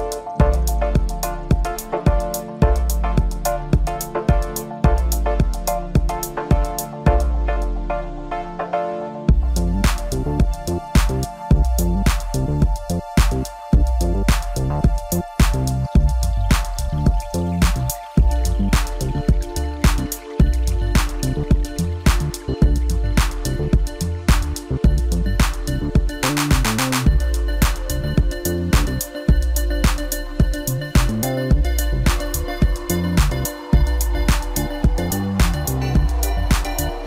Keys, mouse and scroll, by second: 4.0-8.1 drag, 10.2 scroll up 1, 11.1 KP_1, 12.6 Tab, 13.6 KP_Divide, 14.9 scroll up 1, 16.5 click, 18.3 click, 22.2 click, 24.4-25.5 drag, 26.0-27.3 middle drag, 27.3 click, 28.3 KP_1, 30.5-30.9 scroll up 1, 30.9-31.3 scroll down 2, 31.3-33.2 middle drag, 33.2 KP_1, 35.0-35.4 scroll up 1, 35.4-37.0 middle drag.